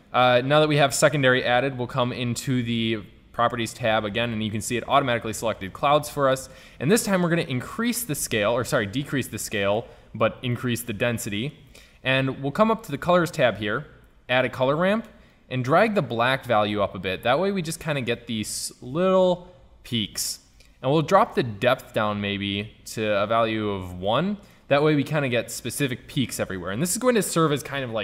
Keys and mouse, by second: 7.9-9.1 middle drag, 10.6-11.2 middle drag, 13.1-16.7 drag, 24.8 middle click.